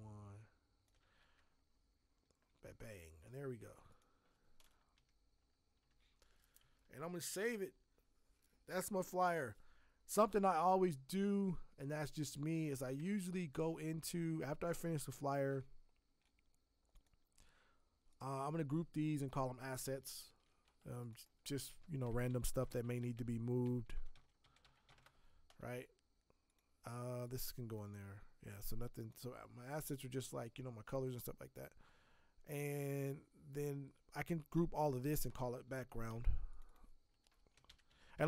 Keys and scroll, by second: 1.2 shift+Tab, 4.9 shift+Left, 5.3 shift+Down, 5.8 shift+Up, 7.0 ctrl+shift+s, 12.9 shift+Tab, 20.2 ctrl+g, 21.8-25.3 typing, 35.6 ctrl+g, 37.6 b, 38.1 Return.